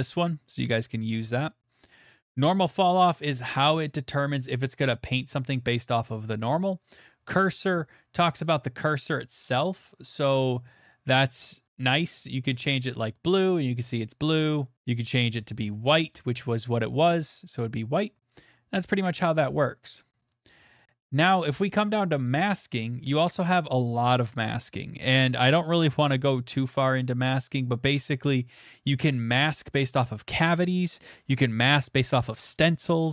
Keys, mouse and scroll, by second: 1.0 scroll, 2.1 click, 2.3 scroll, 3.6 middle click, 4.4 click, 5.0-7.1 middle click, 7.2 middle click, 7.3 middle click, 9.1 click, 11.8 click, 12.6 click, 14.7 click, 17.0 click, 17.7 click, 19.0 click, 20.3 click, 21.1 click, 22.0 click, 22.1 middle click, 22.2 middle click, 24.3 middle click, 24.4 middle click, 24.5 middle click, 25.7 click, 26.1 middle click, 26.1 middle click, 26.2 middle click, 26.2 middle click, 27.3 click, 27.6 scroll, 28.9-29.6 scroll.